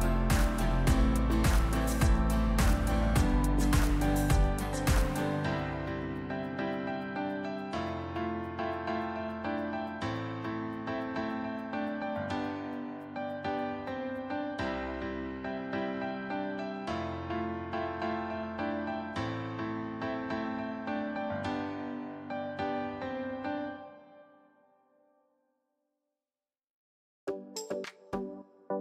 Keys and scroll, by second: 1.2 Tab, 2.0 Tab, 2.0 a, 3.4 ctrl+KP_3, 7.0 KP_1, 8.1 s, 13.0 e, 18.4 ctrl+b, 25.1 Tab, 26.1 Tab, 27.9 shift+z.